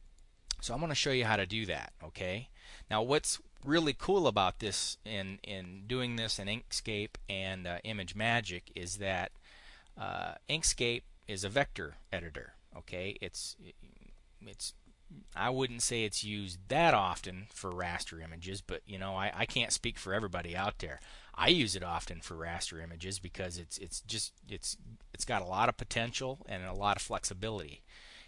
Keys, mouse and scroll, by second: 14.4 click, 24.2 click, 25.0-26.0 drag, 26.3 click.